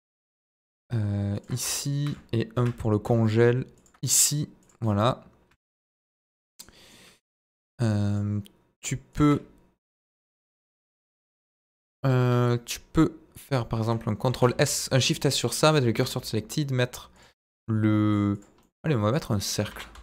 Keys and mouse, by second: 1.3 click, 2.5 shift+d, 2.6 middle click, 3.7 ctrl+click, 4.0-4.3 middle drag, 4.8 middle drag, 5.5 shift+middle drag, 6.1 click, 6.4-6.9 middle drag, 10.0-10.4 middle drag, 12.1 KP_1, 14.2 shift+s, 15.8 shift+a, 18.6-19.2 middle drag, 19.6 r, 19.9 x.